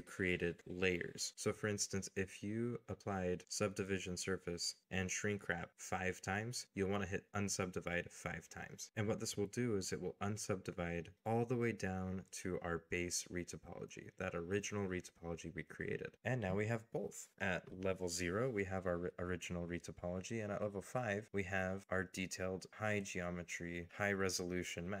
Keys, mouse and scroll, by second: 8.5 scroll up 1, 8.7 scroll down 1, 9.0 shift+middle click, 12.4 middle click, 13.8 middle click, 15.4 middle click, 16.5 scroll down 1, 16.8 middle click, 17.1 shift+middle click, 17.5 shift+middle click, 18.1-20.1 scroll up 1.